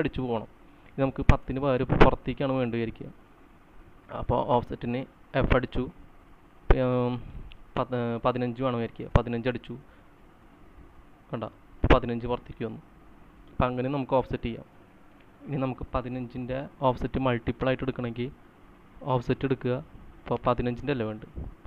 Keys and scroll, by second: 2.0 space, 5.2 space, 5.2 f, 9.0 typing, 9.8 Return, 11.5-12.4 typing, 15.5 c.